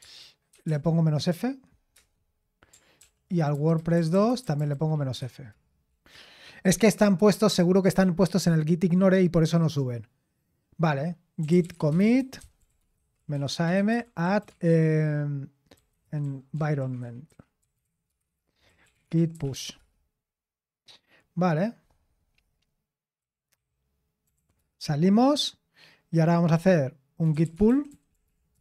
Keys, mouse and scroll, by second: 0.0-1.1 typing, 1.9 Return, 2.7-3.5 typing, 3.5 Left, 3.8 Left, 3.9 Left, 4.1-5.1 Left, 5.1 BackSpace, 5.2 BackSpace, 5.5 Return, 11.1-20.0 typing, 23.2-24.8 typing, 27.0-28.6 typing.